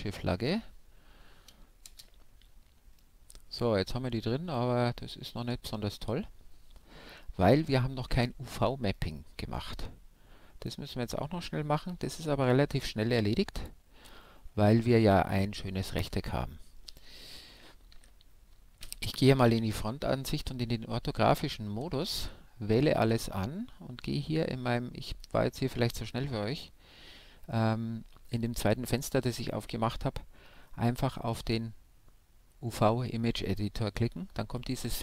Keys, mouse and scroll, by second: 0.9-2.7 middle drag, 3.7-6.8 middle drag, 6.8-8.5 drag, 11.9 shift+F10, 13.5-15.4 middle drag, 15.5-16.7 middle drag, 15.8 KP_1, 16.7 KP_5, 18.2-19.9 middle drag, 19.2 Tab, 19.9 a, 23.6-32.0 drag, 32.0-34.5 middle drag, 33.8-35.0 drag.